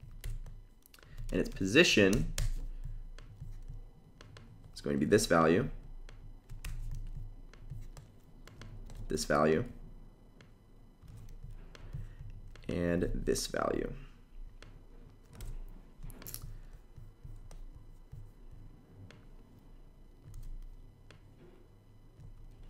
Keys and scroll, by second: 0.0 super+v, 1.8 super+BackSpace, 4.6 super+c, 6.4 super+v, 8.5 super+c, 10.7 super+v, 12.6 super+c, 15.1 super+v, 20.0 super+c, 22.2 super+v.